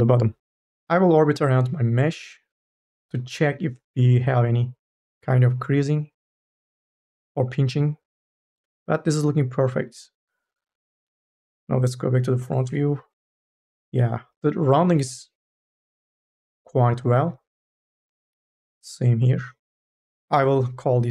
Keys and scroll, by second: 12.7 n, 18.2 n, 18.5 a.